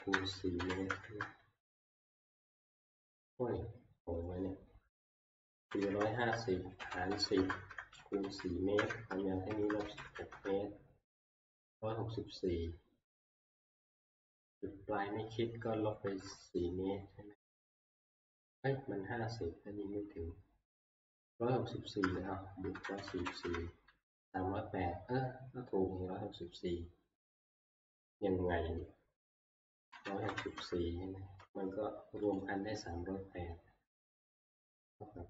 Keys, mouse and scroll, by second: 0.0-0.9 typing, 5.4-9.9 typing, 16.3 -, 22.5-23.5 typing, 24.2 Return, 27.6 click, 28.8 click, 29.7-30.8 typing, 32.4 click, 32.7 typing, 34.3 ctrl+click.